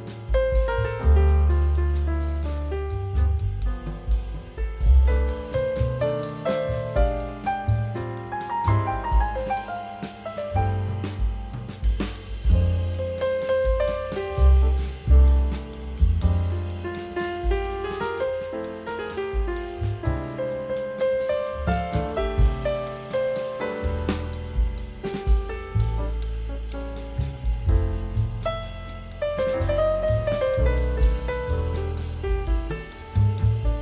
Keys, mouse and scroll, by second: 2.5 scroll up 1, 4.2 scroll down 1, 5.9 ctrl+g, 6.9 shift+right click, 8.5 ctrl+z, 10.2 ctrl+g, 11.6 shift+right click, 12.7-13.1 scroll up 2, 13.7 scroll, 14.0 scroll down 1, 14.9 shift+click, 16.0 ctrl+g, 16.8 shift+click, 17.0 c, 18.6 scroll down 1, 18.8 scroll up 1, 27.4-29.7 typing, 27.4 shift+click, 28.7 shift+click, 29.6 scroll up 1, 31.0 scroll down 1, 31.6 e, 33.5 right click.